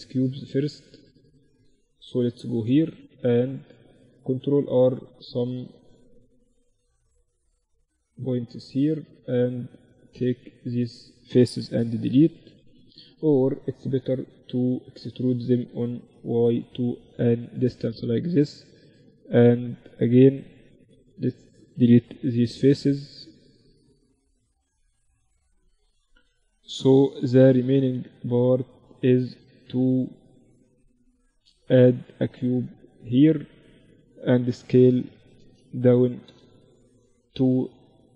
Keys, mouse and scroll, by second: 1.3 KP_1, 2.1 z, 3.5 ctrl+r, 5.5 ctrl+r, 7.7-9.1 drag, 7.9 z, 8.9 right click, 9.7 z, 11.0 x, 13.3 KP_7, 15.3 e, 16.9 z, 17.3-22.5 middle drag, 20.6-22.5 right drag, 21.5 x, 23.5 right click, 24.3 x, 25.7 KP_1, 26.3 z, 29.3 Tab, 30.1-32.5 drag, 30.9 shift+a, 33.7 s, 35.0 s.